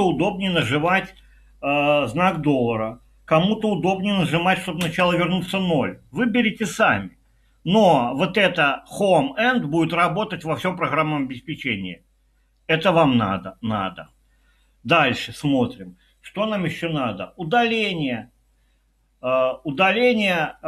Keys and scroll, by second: 0.9 typing, 4.8 typing.